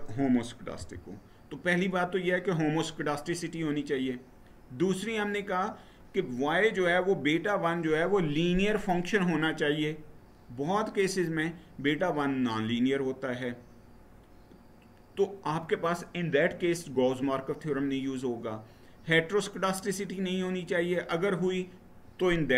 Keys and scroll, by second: 0.5 Right.